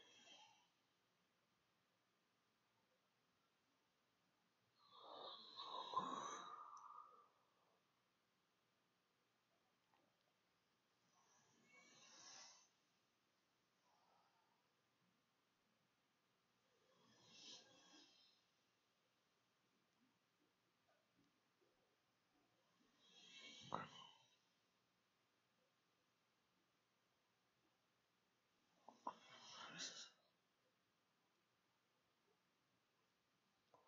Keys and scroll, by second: 18.7 0, 18.9 Up, 19.0 Right, 20.1 shift+Up, 21.1 shift+', 23.0-23.8 typing, 25.3 BackSpace, 26.4 Delete, 27.8 Delete, 30.7 BackSpace.